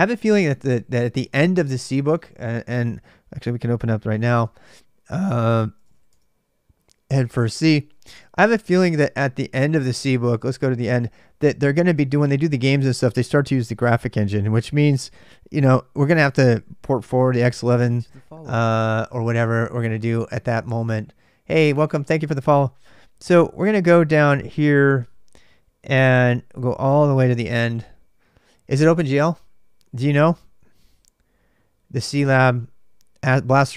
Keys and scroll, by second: 3.7-7.2 typing, 7.4 Tab, 7.9 Return.